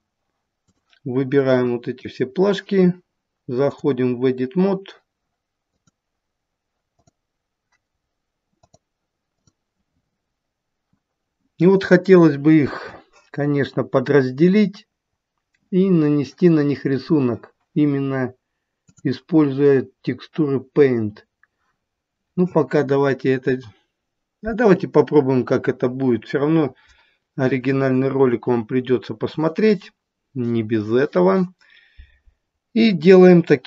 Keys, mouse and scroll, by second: 0.7 click, 1.3 click, 5.7 click, 7.0 click, 12.8-14.3 scroll up 3, 14.3-15.0 scroll down 1, 15.0-15.9 scroll down 1, 19.0 click.